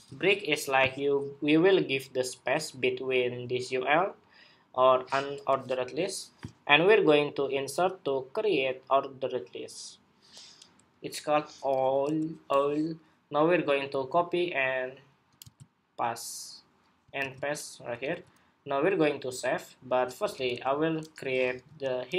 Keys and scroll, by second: 15.1 super+c, 16.9 super+v, 17.8 super+s.